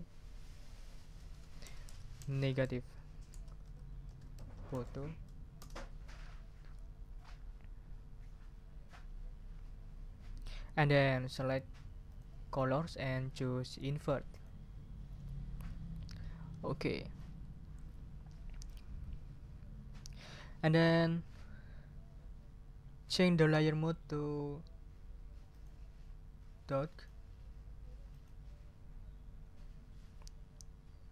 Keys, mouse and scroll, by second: 1.3-5.3 typing, 5.6 Return, 12.1 click, 14.3 click, 25.5 click, 26.6 click, 28.1 click.